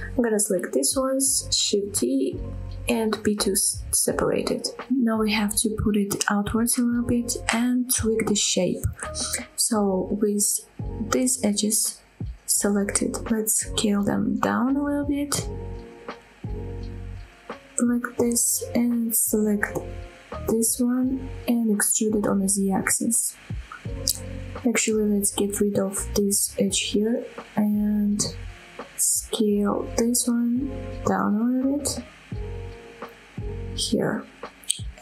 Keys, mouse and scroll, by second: 0.8 shift+d, 1.1 right click, 2.0 p, 2.7 Tab, 3.2 click, 3.7-4.2 middle drag, 4.8 shift+middle drag, 5.2 scroll up 1, 5.4 middle click, 5.9 g, 8.2 click, 8.4-9.3 middle drag, 9.4 Tab, 9.7 middle click, 10.0 scroll up 2, 10.3 shift+middle click, 11.3 click, 12.0 click, 12.6 shift+click, 13.1-15.3 typing, 14.8 click, 14.8 right click, 15.5-16.1 scroll up 6, 16.6-17.2 scroll up 4, 19.0 click, 19.2-20.2 middle drag, 20.5 shift+middle click, 21.1 click, 21.4 middle click, 21.9 e, 22.5 z, 24.0 click, 24.2-25.2 middle drag, 25.5 click, 25.7 middle click, 26.7 x, 27.9 middle click, 28.4 middle click, 29.1 click, 29.3 middle click, 29.8 click, 30.1 middle click, 30.4 click, 31.0 d, 31.2 s, 33.8 click, 34.1 middle click, 34.9 middle click.